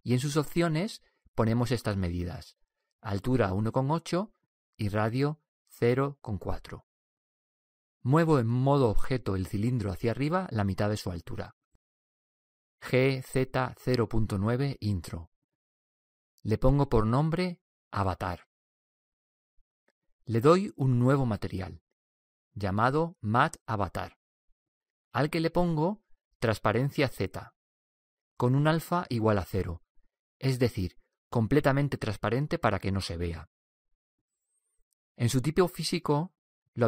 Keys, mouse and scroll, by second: 2.2-4.1 drag, 5.5-7.3 drag, 18.5-21.0 drag, 22.2-33.9 drag, 35.5-36.8 drag.